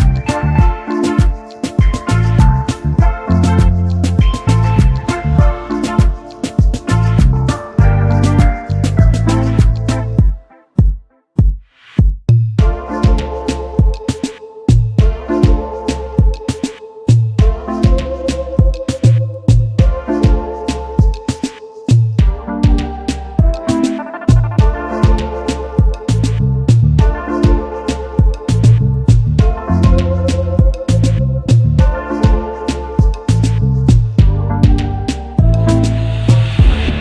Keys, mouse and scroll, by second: 1.3 double click, 1.4 space, 1.5 double click, 1.9 alt+scroll up 1, 2.2 alt+click, 2.4 double click, 3.5 shift+click, 7.4 ctrl+z, 8.9-9.3 alt+scroll up 1, 9.8 shift+click, 10.3-10.8 alt+scroll down 1, 11.3 ctrl+g, 12.0 shift+click, 14.4-14.8 alt+scroll down 1, 15.6 space, 15.8 ctrl+3, 16.4 ctrl+x, 18.6 alt+scroll down 1, 23.2 ctrl+alt+2, 26.0 space, 28.0 space, 31.5 ctrl+f, 36.2 ctrl+2.